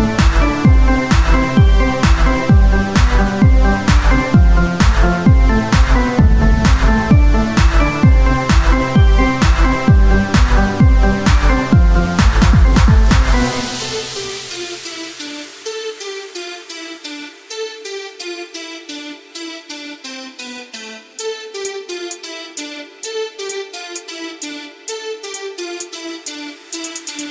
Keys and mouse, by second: 2.3 e, 3.8 KP_1, 5.9 c, 7.2-10.1 drag, 10.9 right click, 11.4 KP_1, 13.4-15.4 drag, 15.4 e, 18.2 e, 20.8-23.4 drag, 21.8 right click, 23.5 KP_1.